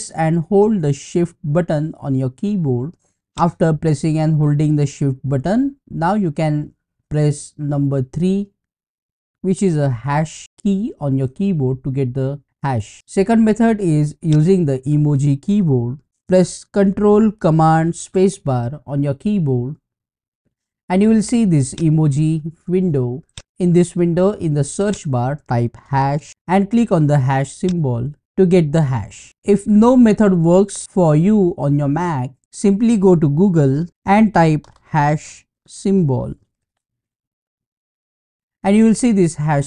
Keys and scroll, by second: 5.7-6.6 typing, 11.3 shift+3.